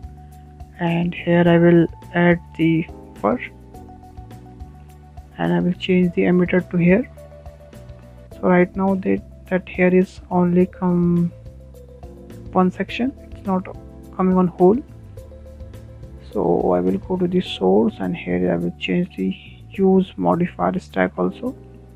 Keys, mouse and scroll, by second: 1.6 click, 2.2-2.5 scroll down 4, 2.5 middle click, 3.1 scroll up 2, 3.4-5.9 shift+middle drag, 5.9 click, 6.4-11.0 shift+middle drag, 11.0 scroll up 4, 11.5-11.9 scroll down 6, 12.1-17.2 shift+middle drag, 17.2 click, 18.3 scroll down 3, 18.5 middle click, 19.4-19.7 scroll up 5, 19.7-21.5 shift+middle drag, 21.5-21.9 drag.